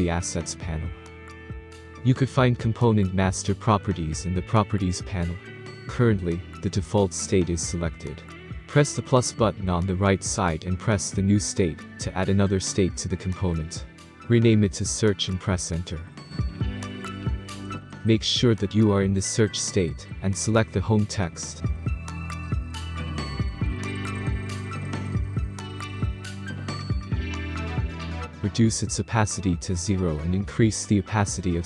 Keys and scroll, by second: 15.0-16.8 typing, 16.9 Return.